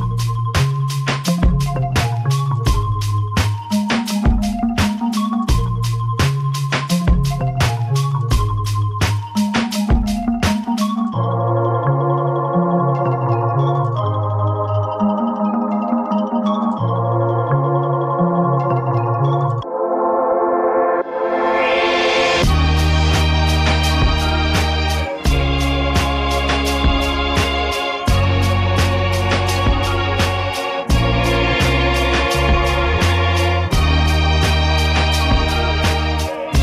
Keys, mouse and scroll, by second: 4.4 F1, 6.8 shift+click, 7.8 shift+click, 8.7 shift+click, 10.6 click, 11.4 click, 13.4 ctrl+KP_Add, 16.5 click, 20.8 click, 22.9 click, 24.9 ctrl+z, 26.3 click, 26.7 click, 27.6 click, 28.3 click, 29.4 ctrl+d, 31.0 shift+click, 32.5 ctrl+KP_Multiply, 34.2 F7, 35.1 click.